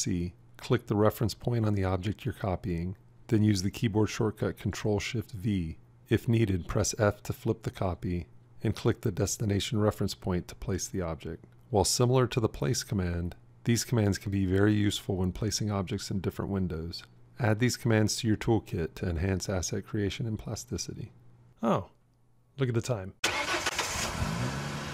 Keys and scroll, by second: 3.4 ctrl+shift+v, 7.7 f, 16.6 ctrl+shift+v.